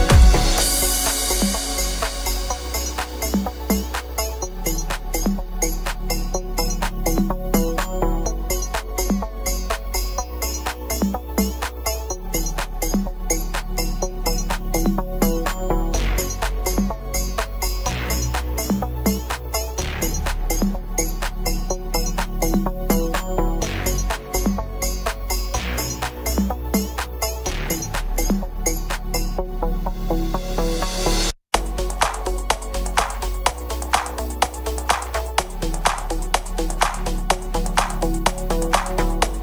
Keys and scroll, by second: 38.2-39.1 typing.